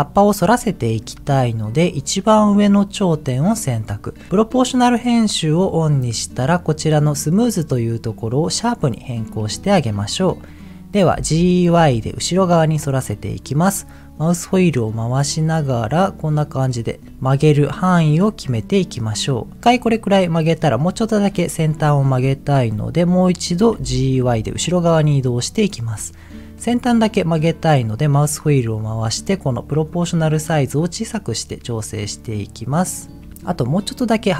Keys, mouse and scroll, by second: 0.6 Tab, 1.9 click, 5.7 click, 6.5-9.1 drag, 9.7-10.2 scroll down 1, 10.2 middle click, 11.1 g, 11.7 y, 12.7-13.4 scroll down 2, 13.6-14.2 scroll down 2, 16.8-17.3 scroll down 4, 17.1-18.0 scroll up 10, 18.0-18.8 scroll down 4, 19.6 click, 19.7 middle click, 21.9 shift+middle click, 23.7 g, 24.1 y, 27.6-28.6 scroll up 5, 28.7 scroll up 3, 30.0-31.0 scroll up 1, 32.9 click, 33.3 middle click, 33.7 middle click.